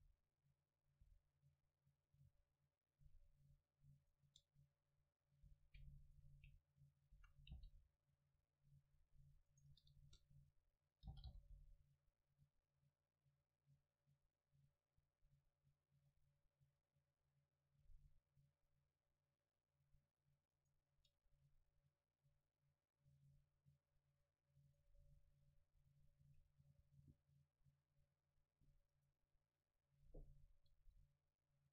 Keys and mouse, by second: 1.1 a, 4.0 right click, 4.3 Tab, 5.0 middle click, 5.6 a, 7.2 a, 7.6 c, 9.7-11.3 drag, 10.0 KP_0, 11.2 g, 20.7-23.0 right drag, 21.0 Tab, 24.7-26.7 right drag, 26.1-28.0 drag, 29.7-31.7 drag.